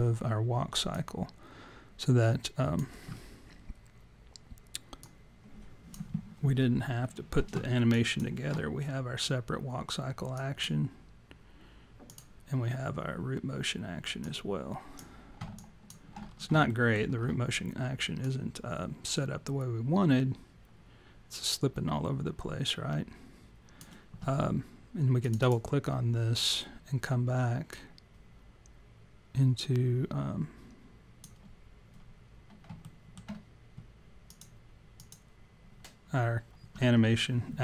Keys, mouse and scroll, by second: 1.0 click, 5.0 click, 7.9 alt+click, 10.4 click, 12.1 click, 14.2 click, 15.5 alt+click, 15.8 alt+click, 16.2-16.8 scroll down 4, 16.7 alt+middle click, 18.2 click, 25.4 click, 27.7 click, 32.8 alt+middle click, 34.3 click, 35.1 click.